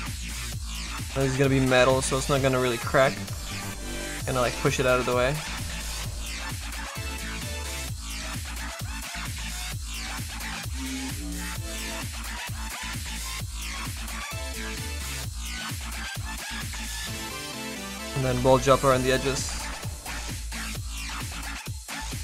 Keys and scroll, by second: 13.0 s.